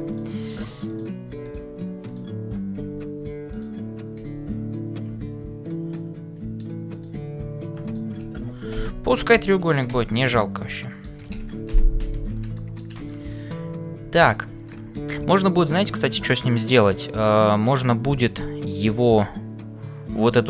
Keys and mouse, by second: 0.1 click, 0.9 click, 1.4 click, 2.8 f, 5.9 middle click, 7.8 click, 8.8 f, 9.5 middle click, 10.2 Tab, 10.8-12.0 middle drag, 11.5 ctrl+s, 12.6 shift+middle click, 13.0-14.4 middle drag, 14.9 middle click, 15.4-17.1 middle drag.